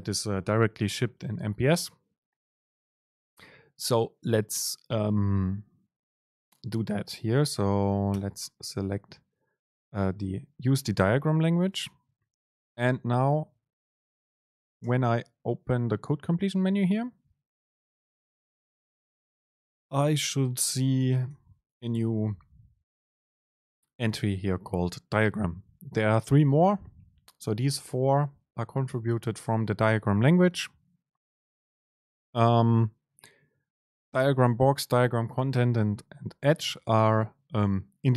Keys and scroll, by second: 14.9 super+space.